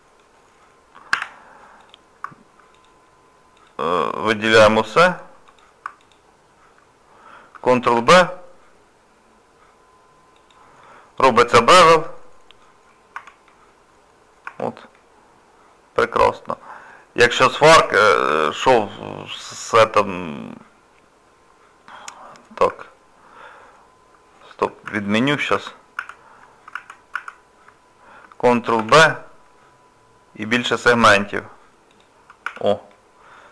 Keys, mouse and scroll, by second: 1.1 2, 1.8 click, 2.7 click, 4.5 alt+click, 4.7 alt+click, 6.0 alt+click, 8.0 ctrl+b, 10.8 middle click, 12.9 scroll down 2, 13.2 Tab, 13.5 middle click, 14.5 Tab, 14.9 middle click, 16.9-17.2 scroll up 4, 17.5 shift+middle click, 18.1 scroll down 1, 18.3 Tab, 19.3 middle click, 24.9 ctrl+z, 25.6 ctrl+z, 32.9 middle click.